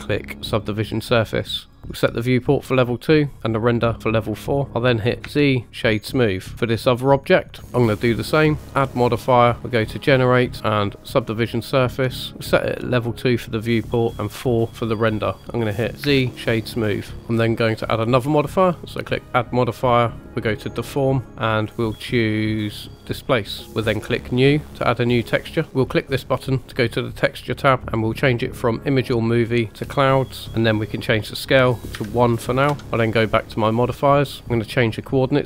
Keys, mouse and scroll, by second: 1.7 click, 3.4 click, 3.6 click, 4.7 middle click, 5.2 z, 6.5 click, 8.6-10.5 drag, 12.4 click, 14.1 click, 15.4 middle click, 16.0 z, 17.2 middle click, 19.0-20.9 drag, 23.7-24.2 scroll down 2, 24.2 click, 25.4-25.7 scroll up 1, 26.7 click, 28.6 click, 31.0-32.8 drag, 33.7 click.